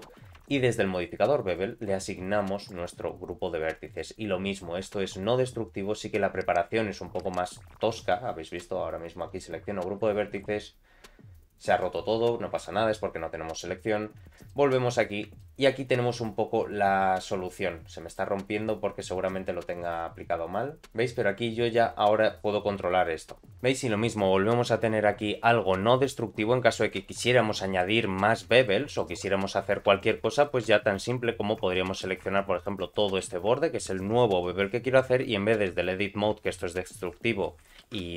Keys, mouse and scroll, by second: 0.5 Tab, 1.5 click, 2.6 click, 3.8 click, 4.5-4.9 scroll down 2, 7.0-7.3 scroll down 1, 7.3 click, 8.5-10.5 drag, 11.7-13.7 drag, 14.5 middle click, 14.9 scroll down 1, 14.9 scroll up 2, 15.3-17.2 shift+middle drag, 17.2 click, 19.7-26.9 drag, 27.3-27.8 scroll down 2, 27.8 middle click, 28.5 Tab, 28.6 middle click, 29.8 2, 30.0 click, 30.4 shift+middle click, 31.7 middle click, 32.6 click, 32.9 shift+middle click, 33.9 ctrl+click, 34.4 middle click, 35.6 ctrl+b, 37.8 ctrl+z.